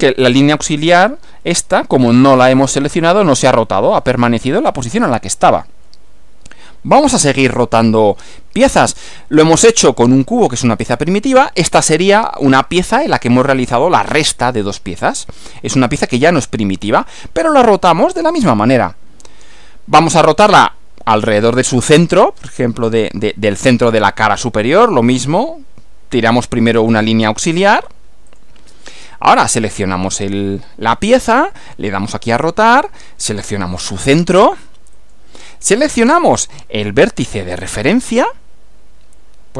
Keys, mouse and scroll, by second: 1.5-2.5 middle drag, 4.5-6.0 middle drag, 6.6-8.1 middle drag, 9.4 click, 13.2-14.2 middle drag, 16.4-17.4 middle drag, 25.3 click, 26.9 click, 28.3 click, 29.5 click, 32.3 click, 35.0 click.